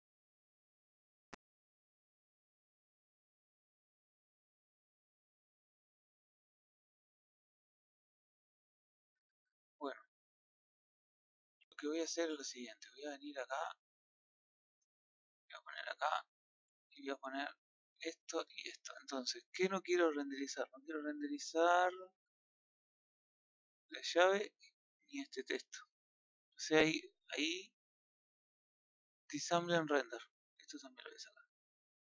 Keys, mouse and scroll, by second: 23.7 click, 24.6 click, 30.3 click, 30.8 click.